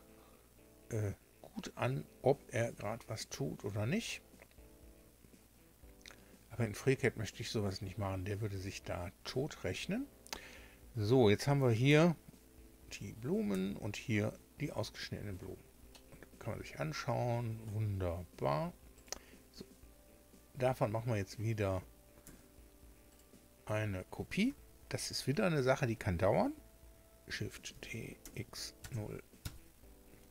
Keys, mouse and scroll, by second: 11.8 1, 13.5 2, 15.8-17.8 middle drag, 18.9 right click, 22.2 a, 23.0 right click, 27.6 shift+d, 28.2 x, 28.7 KP_0.